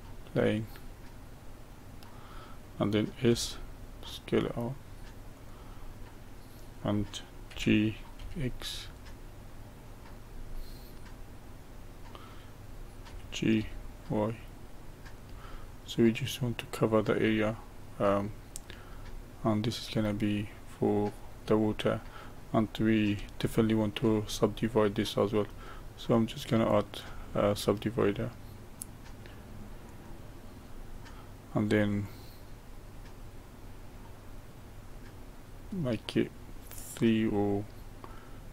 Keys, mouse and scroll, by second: 0.7-3.2 middle drag, 3.2 s, 5.8-7.5 middle drag, 7.5 g, 10.5-13.0 middle drag, 13.0 g, 15.4-18.6 middle drag, 18.9-21.7 middle drag, 21.7-23.4 scroll up 1, 23.4-24.4 shift+middle drag, 24.4 scroll down 1, 25.0-26.6 middle drag, 26.6-29.8 drag, 32.0-35.2 drag, 36.4-38.5 middle drag.